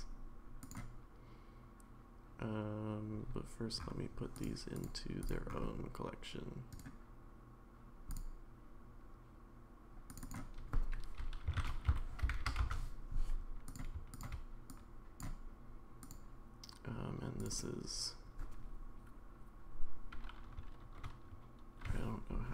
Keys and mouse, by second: 0.6 click, 4.3 click, 4.7 click, 5.2 click, 6.7-8.2 right drag, 10.2-13.2 drag, 13.7 click, 14.2 shift+click, 14.7 click, 16.0 click, 17.5-22.5 drag.